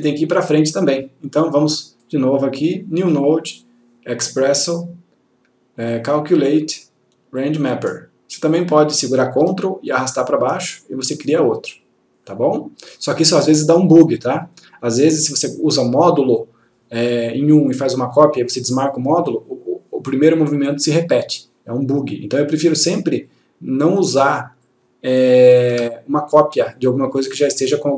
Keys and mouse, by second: 2.1 right click, 7.5 click, 10.0-10.9 ctrl+click, 23.4 click, 25.8 Delete.